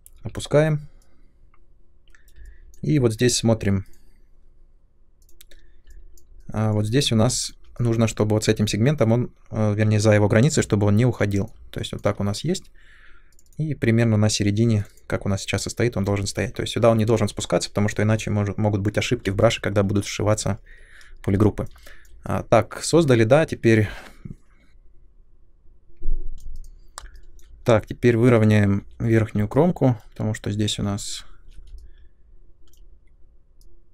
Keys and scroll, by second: 0.1 w, 7.2 3, 24.7 ctrl+shift+z, 27.6 2, 28.8 r, 31.0 ctrl+1.